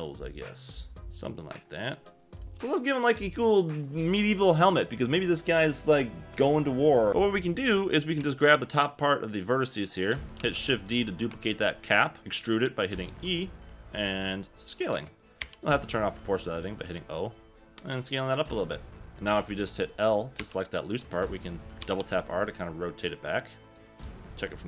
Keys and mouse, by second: 1.0 click, 1.0 g, 2.5 1, 8.2 b, 10.4 shift+d, 11.3 Escape, 12.2 Escape, 12.2 e, 14.1 s, 14.9 Escape, 15.4 o, 16.8 s, 18.2 click, 18.3 g, 19.3 l, 20.4 l, 21.8 r, 22.0 r, 23.6 middle click.